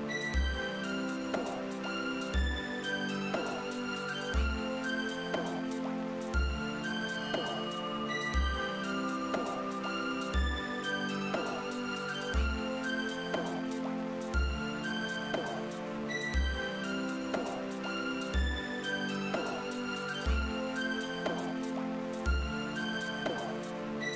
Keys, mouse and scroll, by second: 3.2 click, 9.0 click, 14.5 d, 15.5-18.1 drag, 19.0 click, 21.2 click, 22.0 click.